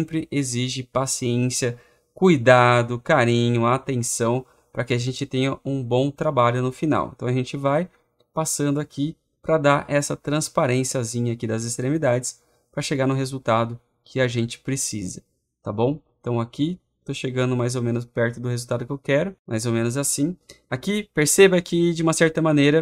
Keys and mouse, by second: 12.5 click, 19.3 click.